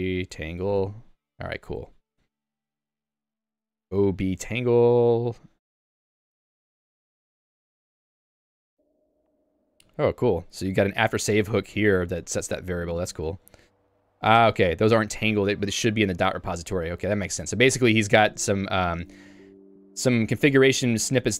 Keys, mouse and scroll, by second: 14.3 ctrl+g, 17.4 Tab, 18.5 q.